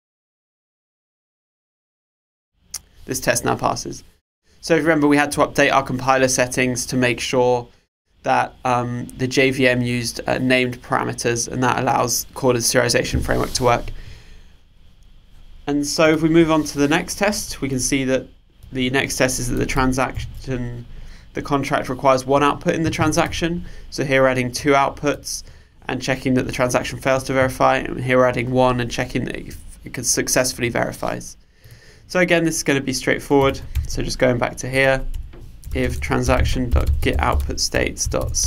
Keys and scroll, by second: 20.2 super+/, 33.5 super+1, 38.0 Return.